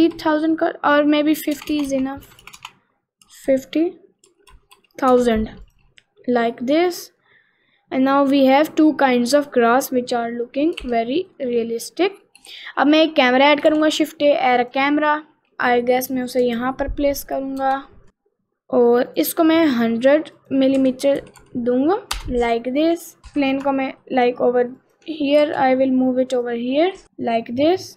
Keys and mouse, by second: 1.8 BackSpace, 4.5 0, 5.7 click, 6.6 middle click, 7.6 middle click, 8.6 middle click, 10.9 ctrl+s, 11.4 middle click, 12.0 middle click, 12.6 shift+a, 13.7 shift+a, 15.2 middle click, 15.5 middle click, 17.6 ctrl+alt+KP_0, 19.2 click, 20.4-22.3 drag, 21.5 0, 23.2 middle click, 23.2 g, 25.5 ctrl+z, 26.0 click, 27.0 g, 27.1 middle click.